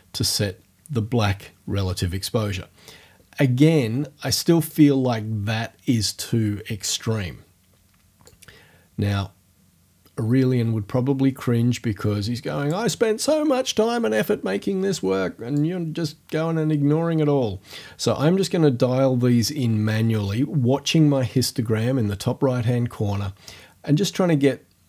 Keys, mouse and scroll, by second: 4.6 click, 8.3-12.9 drag, 15.6-24.8 drag.